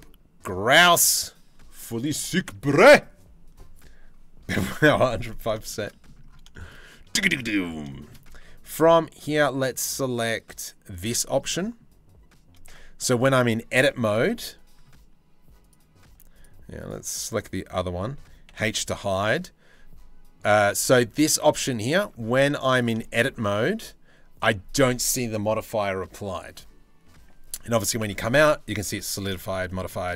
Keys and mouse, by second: 6.1 shift+middle drag, 7.0 Tab, 7.5 shift+middle click, 8.0 Tab, 12.3 Tab, 13.9 Tab, 15.7 z, 18.2 h, 20.1 Tab, 21.6 Tab, 22.0 z, 27.7 Tab, 28.6 Tab, 29.3 middle click.